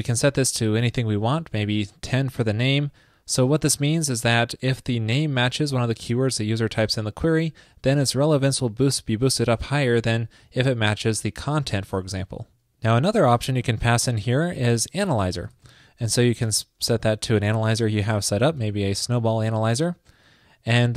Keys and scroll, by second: 11.0 alt+shift+Left, 12.1 super+s.